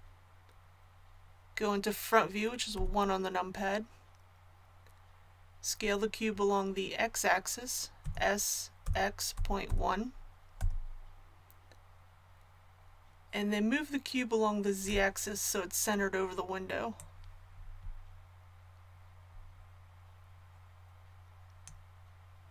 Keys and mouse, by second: 2.7 KP_1, 8.0 s, 16.9-18.9 drag.